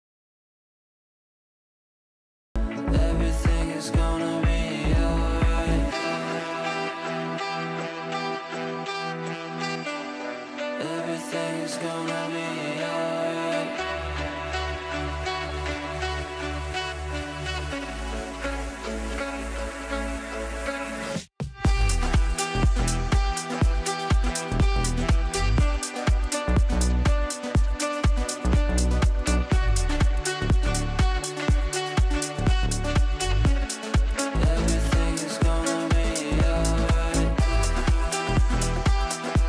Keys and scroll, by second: 20.5 Return, 22.1 c, 27.5 t, 29.6 Down.